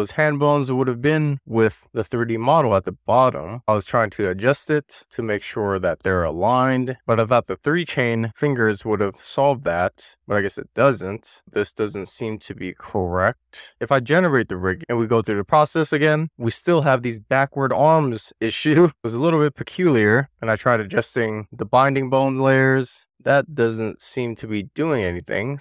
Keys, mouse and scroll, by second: 3.5 middle click, 3.8 click, 4.1 scroll down 1, 4.2 click, 4.5 click, 4.6 super+z, 5.5 click, 5.6 shift+middle click, 5.7-8.8 scroll up 2, 8.8 scroll down 3, 8.9 shift+middle click, 9.2 scroll up 1, 9.3 middle click, 9.4 scroll down 1, 9.5 shift+click, 10.0 shift+middle click, 10.2 click, 10.7 middle click, 10.8 click, 11.2 middle click, 11.9 shift+middle click, 12.6 scroll down 5, 12.7 middle click, 12.9 shift+middle click, 13.0 scroll up 2, 13.2 middle click, 13.4 click, 13.8 click, 14.3 scroll down 1, 14.4 middle click, 15.1 click, 15.8 middle click, 15.9 click, 16.9 shift+middle click, 17.3-17.6 middle drag, 17.9-18.3 scroll up 2, 18.3-19.7 middle drag, 21.2 click, 22.4 click, 22.9 click, 23.6 click, 24.7 click, 25.1 click.